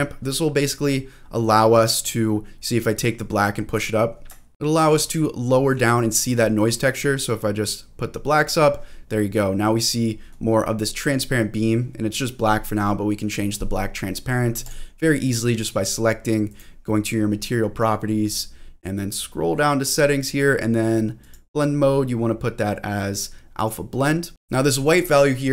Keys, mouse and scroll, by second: 0.7-3.7 drag, 4.0-4.5 scroll up 2, 4.5 click, 5.7 click, 6.7-8.5 drag, 8.7-9.2 scroll down 1, 9.2-10.3 middle drag, 10.5-11.7 scroll up 5, 11.7 middle click, 13.9-14.2 scroll down 1, 14.6 click, 14.9-15.4 scroll down 1, 16.5 click, 17.4-18.0 scroll down 2, 19.1-21.2 scroll down 4, 21.2-23.7 drag, 24.3 click, 24.3 scroll up 3.